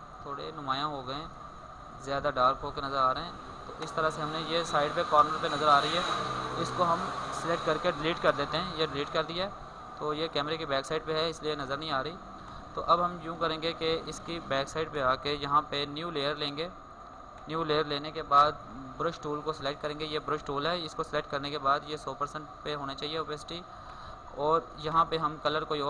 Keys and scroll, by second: 4.4 ctrl+space, 9.2 alt+space, 14.4 ctrl+space.